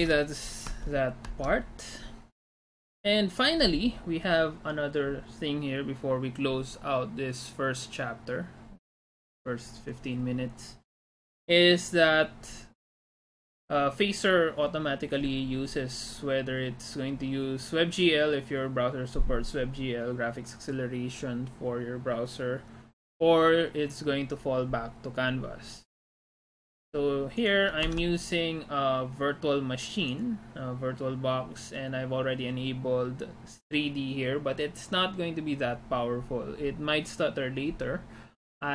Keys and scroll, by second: 0.9 alt+Tab, 28.0 alt+Tab.